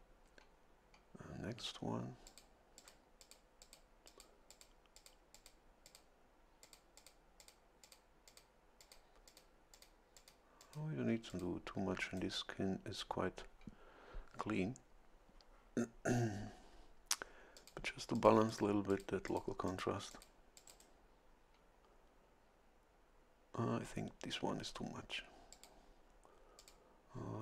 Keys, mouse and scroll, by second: 2.2 click, 2.8 click, 3.2 click, 3.6 click, 4.1 click, 4.5 click, 4.9 click, 5.3 click, 5.8 click, 6.6 click, 7.4 click, 7.8 click, 8.3 click, 8.8 click, 9.3 click, 9.7 click, 10.2 click, 10.6 click, 11.3 click, 12.0 right click, 17.5 click, 18.1 click, 18.9 click, 19.3 click, 19.7 click, 20.1 click, 20.6 click, 20.7 right click, 25.5 click, 26.6 click.